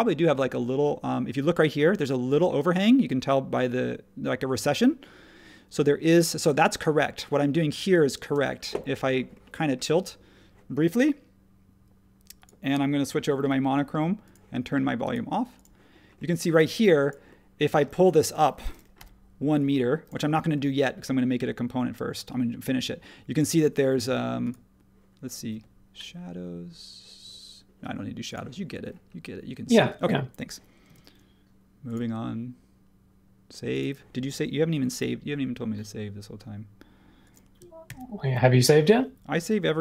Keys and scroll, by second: 8.2 space, 16.5 space, 17.8 space, 18.9 p, 30.8 space, 37.8 super+s.